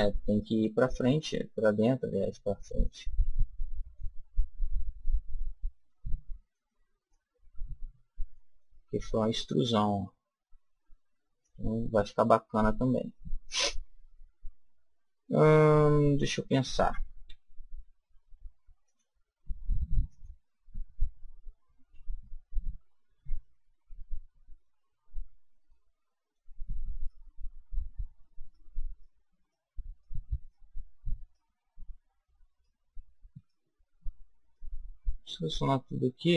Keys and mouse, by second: 2.1 click, 3.5-5.1 middle drag, 5.8-7.0 middle drag, 7.0-8.1 drag, 9.0-10.3 middle drag, 11.3 click, 12.4 middle click, 13.1-14.3 middle drag, 17.2 a, 18.8-21.7 drag, 25.6-27.3 middle drag, 26.8 click, 27.3-36.3 right drag.